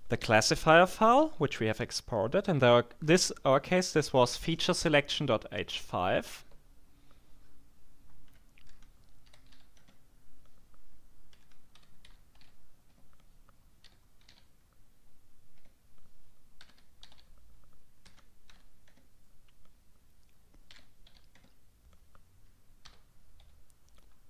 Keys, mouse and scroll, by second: 8.2-10.0 typing, 11.0-14.8 typing, 12.9 shift+Tab, 15.6 Tab, 16.4-18.5 typing, 18.9 shift+Tab, 20.4-21.6 typing, 22.8 h.